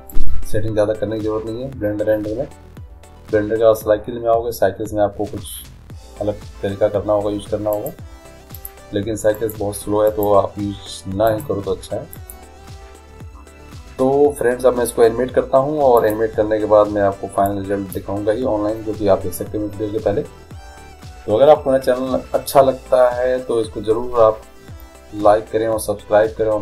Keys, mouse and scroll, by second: 0.2-2.0 drag, 7.8-14.0 drag, 16.0-19.3 drag.